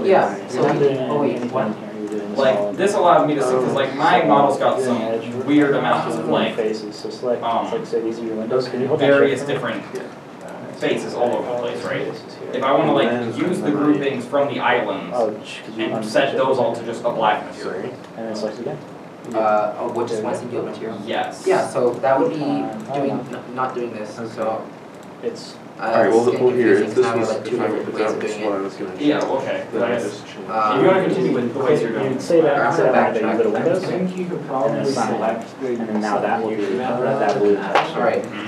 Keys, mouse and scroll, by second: 22.9 Tab, 24.2 Tab, 25.8 middle click, 26.1 scroll down 1, 26.8 middle click, 35.4 middle click, 35.4 Tab, 37.8 Tab, 38.3 alt+middle click.